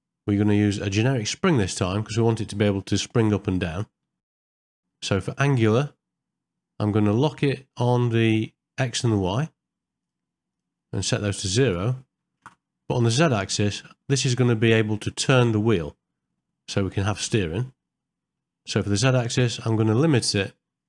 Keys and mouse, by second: 0.0-1.7 drag, 2.5 middle click, 4.2 shift+middle click, 4.4 middle click, 5.0 middle click, 11.1-12.5 drag, 16.9 middle click, 18.0 middle click, 19.8 click, 20.5-20.8 drag.